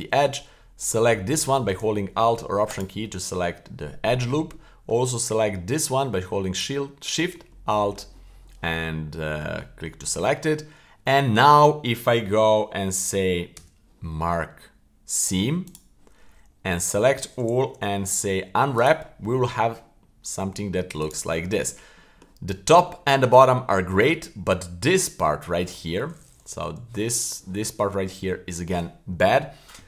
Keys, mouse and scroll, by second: 0.8-1.3 right drag, 2.7 alt+right click, 4.3-4.9 middle drag, 6.5 alt+shift+right click, 7.5-7.9 middle drag, 9.1-9.5 middle drag, 9.7 middle click, 10.1-10.4 middle drag, 10.6-11.2 scroll down 2, 11.2 middle click, 13.5 w, 16.8 a, 17.7 u, 20.0-20.8 middle drag, 21.1-21.4 right drag, 21.4-21.7 middle drag, 22.1 middle click, 22.7-23.3 middle drag, 23.8 middle click, 26.5 l, 27.3 a.